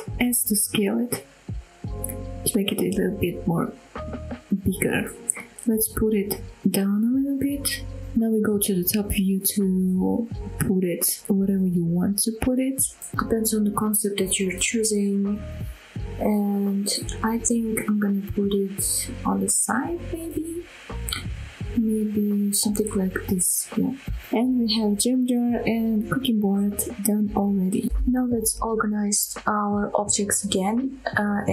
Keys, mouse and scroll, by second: 2.5 click, 2.8-3.2 middle drag, 3.5 KP_1, 3.9-4.7 scroll up 3, 4.8 g, 5.1 z, 7.7 shift+click, 8.7 KP_7, 9.1 scroll down 2, 9.6 shift+middle drag, 10.2 g, 23.4 click, 23.8-24.1 scroll down 2, 24.1-25.0 middle drag, 25.2 scroll up 1, 25.4 click, 25.7-26.3 middle drag, 26.5-27.1 middle drag, 27.3 scroll down 1, 27.5-27.9 middle drag, 28.9 click, 29.2 scroll down 1, 29.5 middle drag, 29.9 scroll up 1, 30.3-30.7 shift+middle drag.